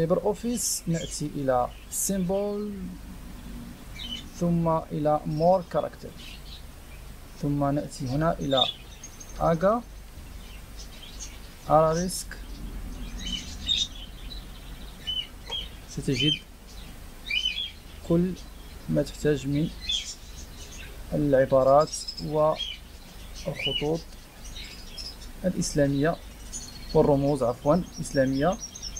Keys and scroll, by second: 9.5-10.5 typing.